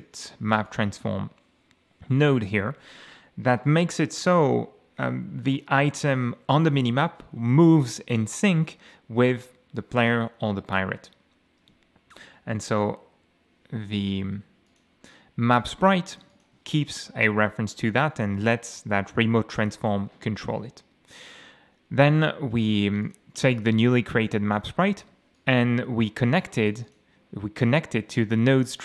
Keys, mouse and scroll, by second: 0.7 click, 13.1 F3, 14.7 click, 15.6 click, 16.1 click, 21.2-21.5 scroll down 1, 23.0 click, 23.4 click, 25.3 click, 26.7 click.